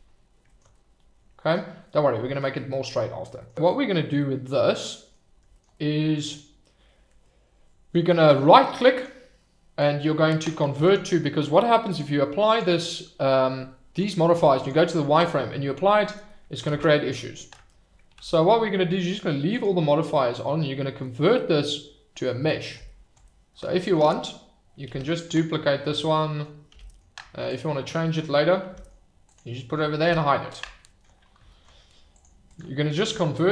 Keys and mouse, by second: 0.7-1.5 middle drag, 1.8-2.4 middle drag, 2.6 middle drag, 4.1-5.1 middle drag, 5.7-6.3 middle drag, 7.2-7.9 middle drag, 8.9-10.8 right drag, 11.8-12.5 drag, 14.6-15.2 drag, 15.7-16.1 middle drag, 16.7 ctrl+z, 18.2 ctrl+z, 19.5-23.6 right drag, 24.9 shift+d, 25.1 middle click, 25.8 Escape, 26.2 middle drag, 26.7 g, 26.8 middle click, 27.4 click, 28.3 middle drag, 28.7 g, 28.7 middle click, 29.2 click, 30.0 h, 32.2 click, 32.5-33.5 right drag.